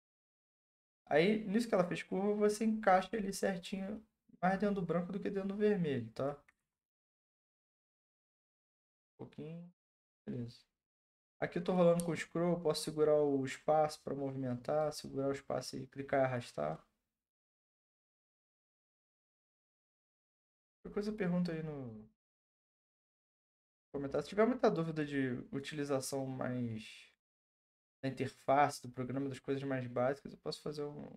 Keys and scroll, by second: 6.6 ctrl+z.